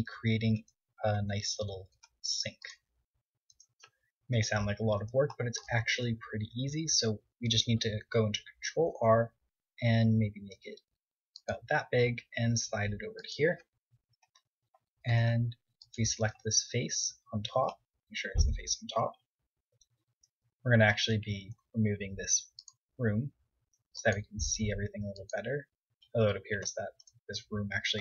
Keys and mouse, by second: 0.0 Tab, 0.7 ctrl+Tab, 3.0 KP_7, 3.4 z, 6.2 ctrl+r, 12.1-13.8 drag, 13.8 ctrl+Tab, 14.8 click, 16.0 z, 16.5 middle click, 16.9 middle click, 17.2 middle click, 18.4 KP_7, 19.8 Tab, 23.5-25.2 drag, 25.2 Tab, 26.5 m.